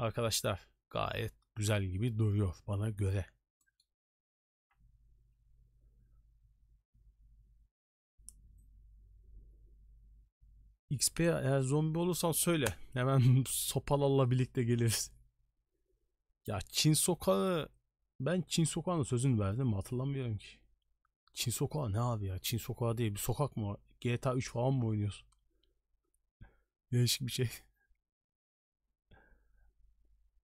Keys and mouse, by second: 3.7 middle click.